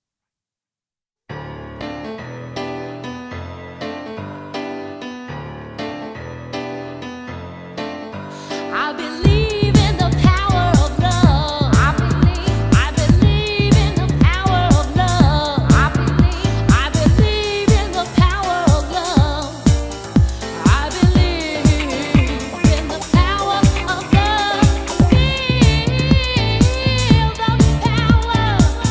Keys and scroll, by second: 1.3 alt+i, 1.5 alt+2, 1.8 alt+3, 12.7 super+space.